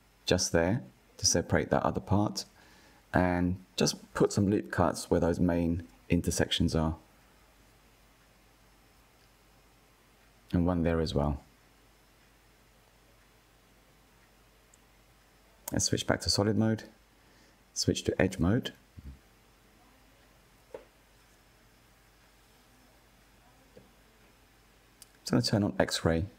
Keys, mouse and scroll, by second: 1.2 ctrl+r, 8.4 ctrl+r, 12.5-14.6 drag, 15.4-16.8 middle drag, 16.8 click, 17.7-19.4 middle drag, 19.4 KP_1, 21.1-22.0 scroll up 1, 22.0-23.6 shift+middle drag, 23.6-25.5 drag.